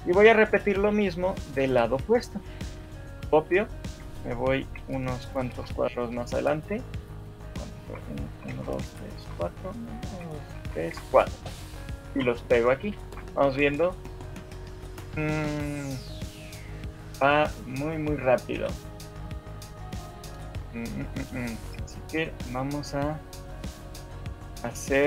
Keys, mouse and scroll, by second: 1.5 shift+middle click, 4.1 ctrl+c, 4.1 Right, 4.9 Right, 5.7 Right, 7.5 right click, 8.3 Right, 8.5-9.3 Right, 10.1 Right, 10.7 Right, 10.9 Right, 12.1 ctrl+v, 13.1 shift+Left, 13.5 alt+a, 18.6 Escape, 19.4 shift+middle click, 20.2 scroll down 4, 20.8 shift+middle click, 21.2 scroll up 3, 23.0 click, 24.6 shift+middle click.